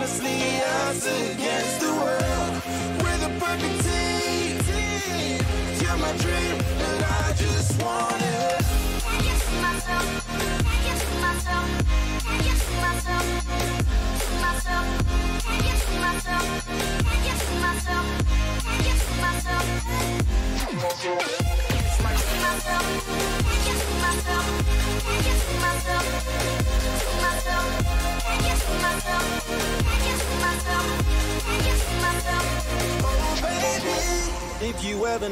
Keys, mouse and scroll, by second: 0.1 Tab, 0.8-3.5 middle drag, 5.9 middle click, 6.2 a, 6.7 a, 7.0 a, 7.4 a, 8.5-10.4 middle drag, 18.2-21.1 middle drag, 18.9 a, 19.2 a, 21.6-27.8 right drag, 26.3 middle click, 27.1 click, 27.6-28.8 middle drag, 30.1 middle click, 31.7-33.8 drag.